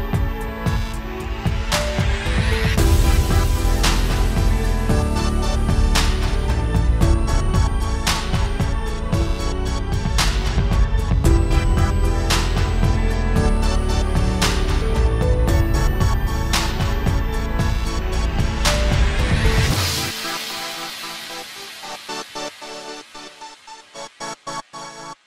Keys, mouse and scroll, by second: 4.3 n, 4.6-4.9 scroll down 3, 4.7 scroll up 1, 4.9 r, 6.0 ctrl+z, 6.2 click, 6.4 click, 6.5 shift+click, 6.9 r, 7.6-8.1 scroll up 4, 8.0 click, 8.1 alt+a, 8.2 scroll down 3, 8.4 shift+middle click, 8.8 click, 9.3-10.7 click, 10.8 shift+click, 11.2 Delete, 11.5 click, 12.2-12.7 scroll up 9, 12.4 shift+middle click, 12.8-14.2 scroll down 15, 13.0 click, 13.2 KP_Decimal, 13.5 middle click, 13.7 alt+a, 14.0 middle click, 14.2-14.7 scroll up 6, 14.9 shift+a, 16.0 scroll down 5, 16.2-16.6 scroll up 3, 16.6 KP_1, 16.9 scroll down 2, 17.0 scroll up 1, 17.3-17.6 scroll down 2, 17.4 scroll up 1, 18.2 ctrl+alt+KP_0, 18.7 scroll down 5, 18.8-19.7 scroll up 4, 19.2 click, 20.6 3, 22.0-22.5 e, 22.5 click, 23.0 shift+`, 24.8 shift+a.